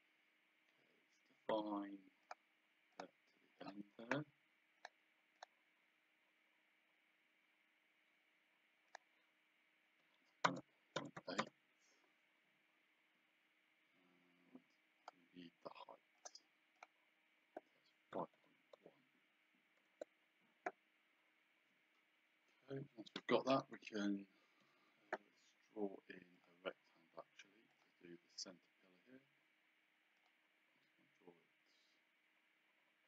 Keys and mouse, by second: 2.2 click, 4.8 click, 5.6 click, 8.9 click, 10.5 KP_0, 11.4 Return, 15.0 click, 16.2 click, 18.1 KP_5, 18.9 KP_0, 22.4 Escape, 24.8 Escape, 26.4 click, 27.7 click, 30.2 click.